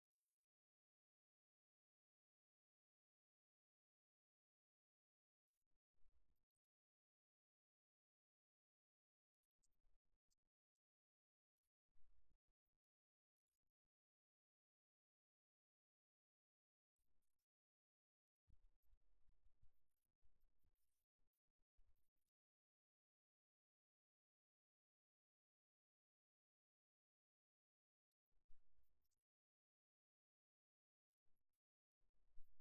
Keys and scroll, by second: 7.0 8.